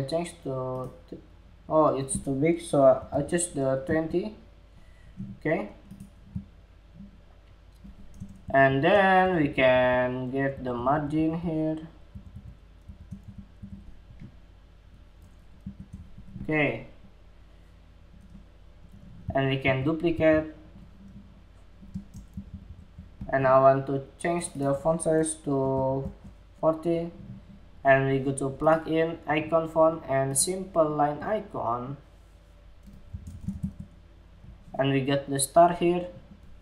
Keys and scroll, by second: 7.9 alt+shift+Up, 8.2 alt+shift+Up, 8.7 alt+Down, 8.9 alt+Down, 9.1 alt+Down, 9.2 alt+Down, 9.4 alt+Down, 10.0 alt+Up, 10.3 alt+Up, 10.4 alt+Up, 10.7 alt+Up, 10.9 alt+Up, 11.6 alt+Up, 11.9 alt+Up, 12.4 alt+Up, 12.8 alt+shift+Left, 13.1 alt+shift+Left, 14.0 alt+shift+Left, 15.1 alt+shift+Right, 19.1 super+c, 20.0 super+v.